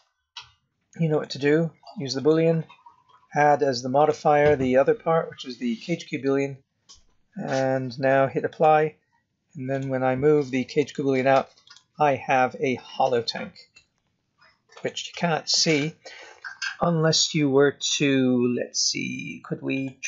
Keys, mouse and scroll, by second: 1.1 click, 3.9 click, 8.5 click, 9.7 click, 10.8 g, 12.0 middle click, 13.8 z, 15.6 click, 19.7 click.